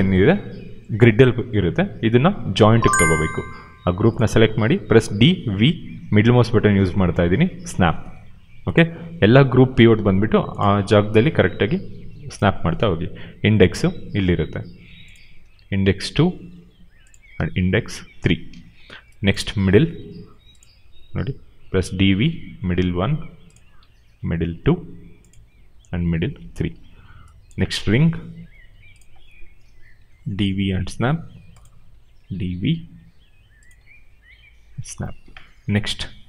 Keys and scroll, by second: 4.9 d, 5.3 v, 21.7 d, 26.3 d, 34.0 v, 34.7 d.